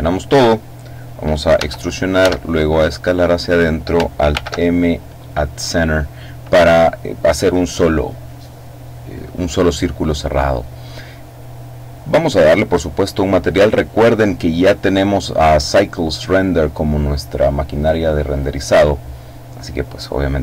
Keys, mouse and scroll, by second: 1.4 e, 2.1 s, 3.3 click, 4.2 alt+m, 5.1 click, 11.0-12.2 drag, 17.7 click.